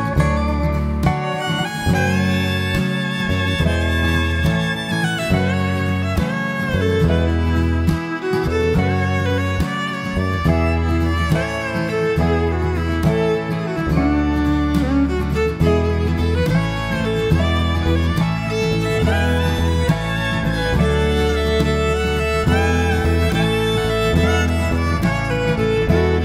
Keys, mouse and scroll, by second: 0.0 click, 0.9 click, 1.6 click, 1.9 click, 2.6 click, 3.0 click, 3.6 click, 3.9-4.2 scroll down 2, 4.2 middle click, 8.4-9.4 scroll up 3, 9.4 click, 11.8 click, 12.5 click, 13.8 click, 14.4 click, 14.9 click, 15.4 click, 15.9 click, 17.0 click, 17.8 click, 18.3 click, 18.9 click, 19.6 click, 20.1 click, 20.8-21.8 scroll down 2, 21.8-22.8 scroll up 4, 22.8 shift+middle click, 23.4-23.8 scroll up 2, 24.2 click, 24.9 click, 25.6 click, 26.0 click.